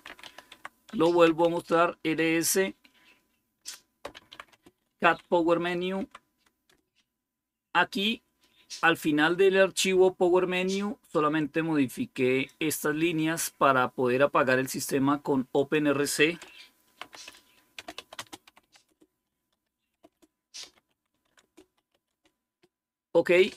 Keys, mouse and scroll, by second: 0.0-1.6 typing, 0.8 Return, 3.7-5.9 typing, 6.5 Return, 12.4 click, 15.4-16.9 drag, 16.7-22.3 typing.